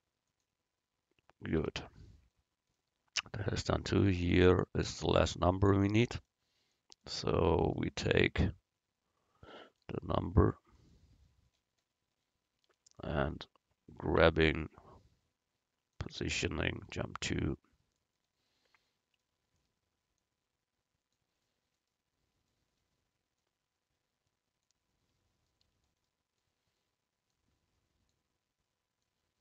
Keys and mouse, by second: 1.7 a, 10.8-12.3 right drag, 14.3 g, 16.9 KP_Decimal, 20.2-22.0 drag, 21.5 middle click, 21.5 right click, 23.4-25.2 drag, 27.4-29.4 drag.